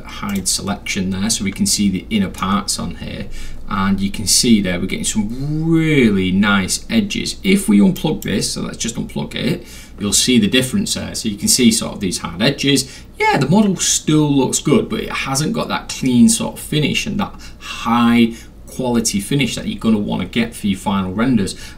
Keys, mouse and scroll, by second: 0.3 click, 1.8 alt+middle click, 3.6 scroll up 2, 3.8 scroll, 3.9 middle click, 8.0 drag.